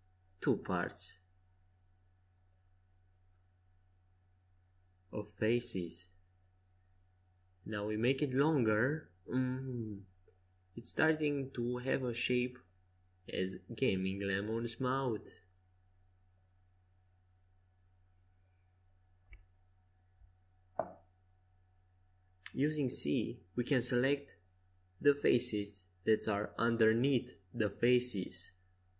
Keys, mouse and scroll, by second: 3.8 Tab, 5.3 s, 13.0 a, 15.3 Tab, 17.9 c, 19.7 a, 23.7 c, 27.5 x.